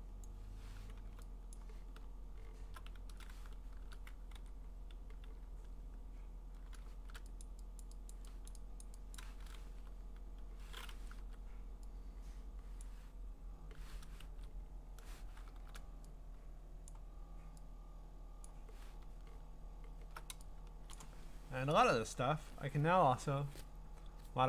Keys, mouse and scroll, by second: 0.2 click, 1.0 b, 1.5 click, 2.1-4.3 scroll, 4.3 e, 6.9 shift+1, 7.4 click, 7.8 !, 7.8 click, 8.1 click, 8.5 click, 8.8 click, 9.2 click, 9.7 b, 11.2 u, 12.8 click, 14.3 ctrl+z, 15.5 shift+4, 16.9 click, 18.5 click, 19.0-20.1 ctrl+scroll, 20.9 click, 22.3 ctrl+u.